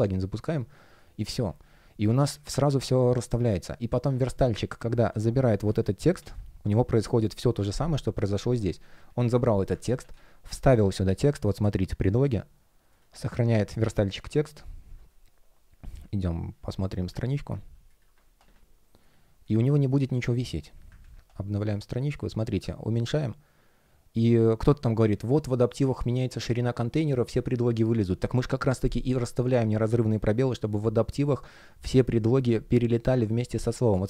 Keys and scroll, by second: 6.0 super+c, 9.7 super+a, 10.0 super+v, 20.9 super+r.